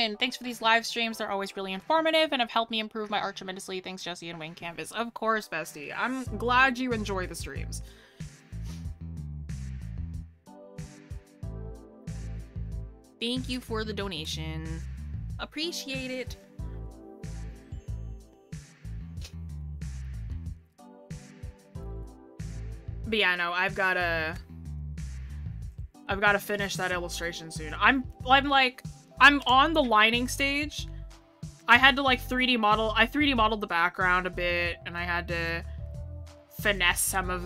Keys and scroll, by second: 7.9 scroll down 1, 7.9 scroll up 1, 24.0 scroll up 1, 24.9 scroll up 1.